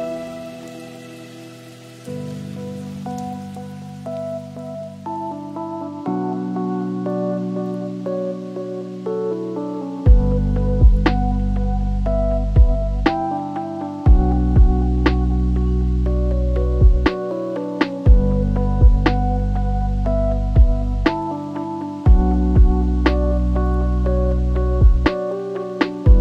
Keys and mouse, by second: 0.2-1.3 shift+drag, 1.5-2.7 drag, 3.3 l, 4.9-6.5 drag, 6.0 l, 7.0-8.1 shift+drag, 7.7 l, 8.6 shift+click, 9.1 r, 10.0-11.3 shift+drag, 11.6-12.8 drag, 13.3-15.4 drag, 15.7 shift+drag, 17.2 click, 21.0 click, 21.6-23.3 drag, 24.5-26.2 drag.